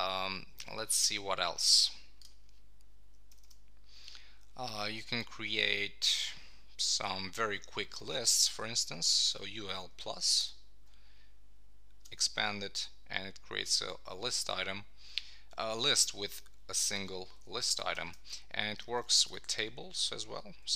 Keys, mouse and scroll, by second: 3.3 Return, 10.4 shift+=, 17.7 Down, 17.9 Return.